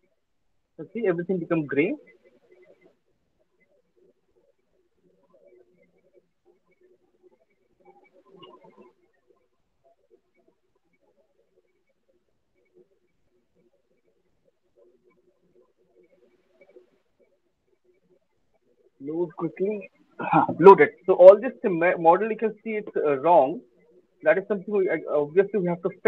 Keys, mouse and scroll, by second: 2.1 click, 3.3 click, 11.4 click, 13.9 click, 14.2 click, 14.5 click, 17.0 click, 17.4 click, 18.5 alt+click, 18.6 alt+click.